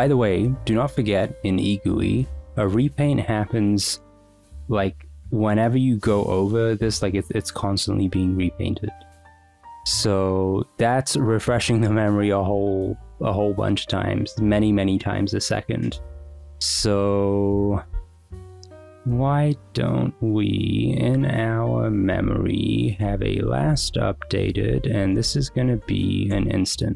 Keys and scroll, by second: 17.0 k, 22.2 Return, 22.6-25.7 typing, 26.3 Return.